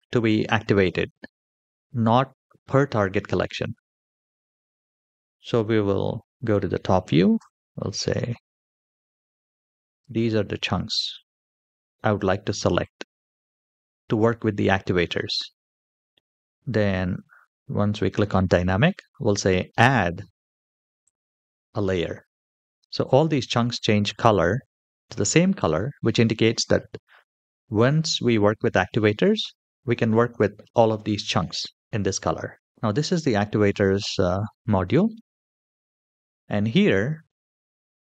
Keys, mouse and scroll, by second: 5.9 KP_7, 7.1 c, 10.9-12.0 middle drag, 12.5-13.0 shift+middle drag, 13.5-15.4 middle drag, 20.8 click, 22.5-24.2 middle drag, 24.6 shift+middle click, 25.0-27.9 middle drag, 29.3-29.7 scroll up 1, 29.9 shift+middle click, 31.8-32.7 scroll down 1, 32.7 middle click, 32.8-34.9 scroll down 3, 34.9-36.2 scroll down 1.